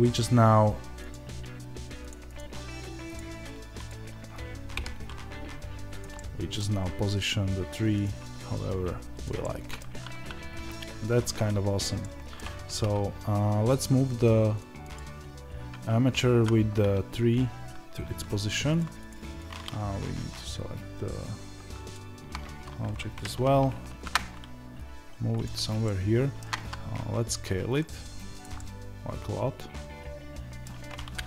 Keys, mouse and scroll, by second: 6.0-7.9 middle drag, 6.7-7.9 scroll up 2, 7.9 click, 9.3 scroll up 2, 9.3-14.8 middle drag, 12.3 scroll down 2, 12.3 Tab, 14.8 click, 16.3 z, 16.6-18.7 scroll down 2, 18.7 click, 21.8 shift+click, 23.1 g, 25.8-31.2 shift+middle drag, 26.5 s, 31.1 KP_0.